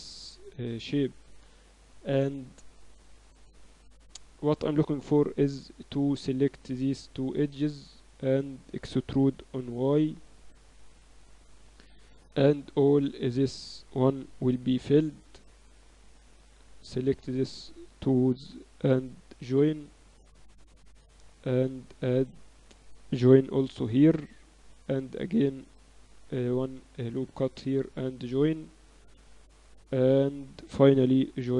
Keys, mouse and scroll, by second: 0.0-0.1 typing, 5.5 a, 6.5 click, 7.0-8.4 middle drag, 8.4-10.0 right drag, 9.1 e, 12.4-14.1 right drag, 14.4 f, 16.1-18.0 drag, 18.0-19.1 right drag, 18.7 j, 20.8 ctrl+r, 22.0-24.2 drag, 24.2 j, 25.5 ctrl+r, 26.7 ctrl+r, 27.6-30.0 drag, 29.0 j, 31.0 j.